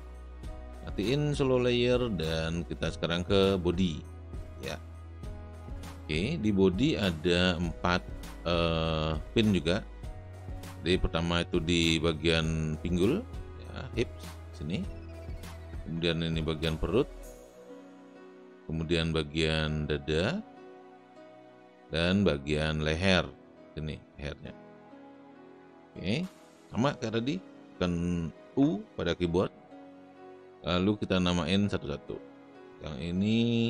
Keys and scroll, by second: 5.7 space, 29.5 u.